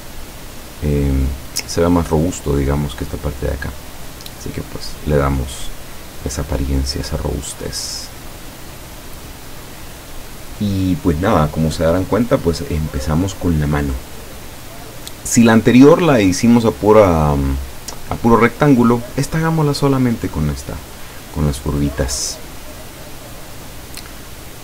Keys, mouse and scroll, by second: 5.5-7.2 drag, 8.1 click, 19.1 click.